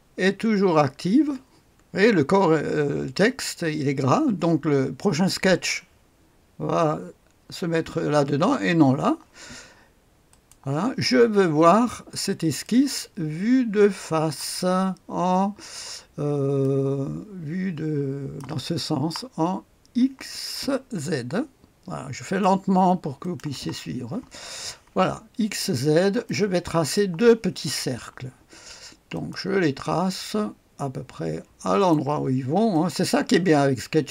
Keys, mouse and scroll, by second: 10.3 click, 12.6-14.3 drag, 16.6-18.4 drag, 22.2 click, 23.1 click, 23.2 middle click, 25.0-26.2 scroll up 2, 26.2-27.6 right drag, 29.1 click, 31.8 click, 32.7 click.